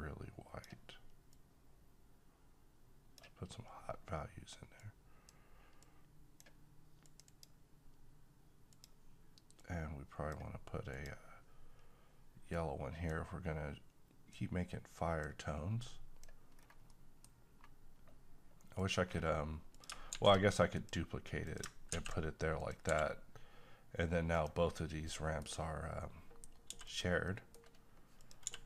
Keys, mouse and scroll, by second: 14.6 click, 16.6-16.9 scroll down 1, 16.9-18.7 middle drag, 18.7 click, 19.1-19.8 scroll down 1, 19.8 click, 20.4 d, 20.8 click, 21.9 ctrl+x, 22.6 click, 22.9 g, 24.4 click, 24.7 scroll down 1, 25.1-26.7 middle drag, 26.7 g, 26.9 click, 27.3 middle click, 28.2 click, 28.5 g.